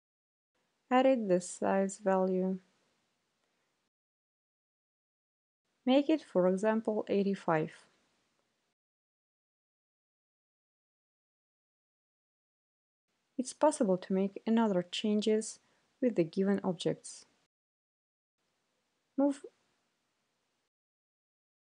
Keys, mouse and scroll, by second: 6.4-7.2 typing, 7.8 click, 10.0 click, 10.9 Delete, 12.4 click, 14.7-20.6 drag, 21.2 right click.